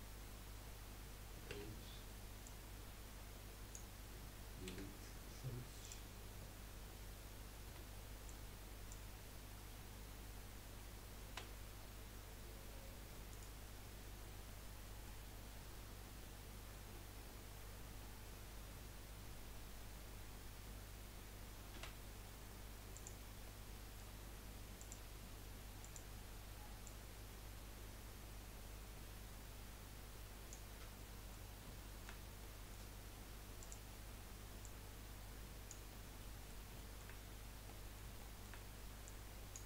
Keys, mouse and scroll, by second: 1.5 3, 2.4 click, 4.8 Delete, 7.6 2, 8.3 Left, 11.3 e, 14.2 scroll down 2, 14.6 middle click, 15.4 scroll up 2, 22.2 s, 23.3-23.7 scroll up 1, 23.7-24.8 middle drag, 24.8 click, 25.8 click, 26.8 click, 31.0-33.6 middle drag, 33.6 click, 34.6 click, 36.0 scroll down 3, 36.2 middle click, 37.1 scroll up 2, 37.7-39.0 middle drag, 39.0 click.